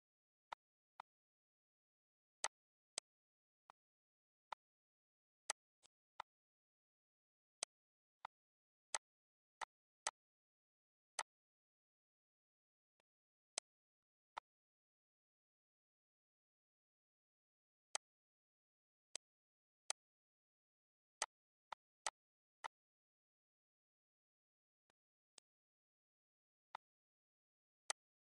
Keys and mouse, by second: 0.3 click, 0.7 click, 2.2 click, 3.4 click, 4.3 click, 5.2 click, 6.9 Delete, 7.3 click, 7.7 Delete, 8.0 click, 8.3 Delete, 8.7 click, 9.0 Delete, 9.2 click, 9.5 Delete, 9.7 click, 10.7 click, 12.4 click, 12.9 click, 13.3 click, 17.3 click, 18.5 click, 19.0 click, 20.1 click, 20.6 shift+click, 21.2 click, 23.0 click, 24.2 click, 24.8 click, 25.5 click, 26.4 click, 26.8 click, 27.6 click.